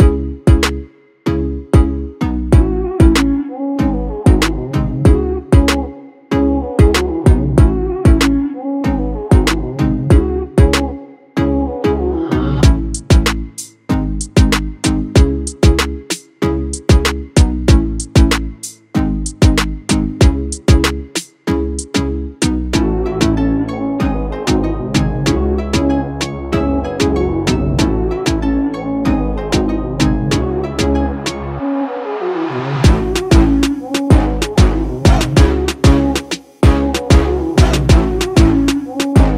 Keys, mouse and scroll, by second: 0.9-7.8 drag, 9.7 right click, 11.1 click, 18.4 click, 21.7-29.3 drag, 31.6 shift+click, 32.8 Down, 34.4 Up, 35.7-39.3 drag.